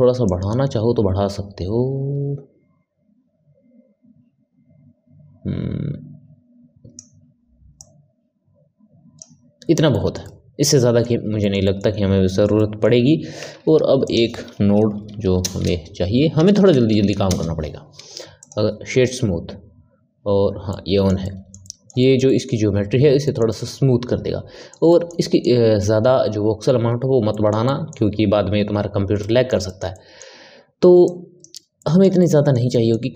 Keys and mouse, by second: 0.2-9.9 drag, 9.9-13.4 ctrl+middle drag, 13.4 shift+a, 20.6-31.0 middle drag, 31.0 click, 31.7-33.1 middle drag.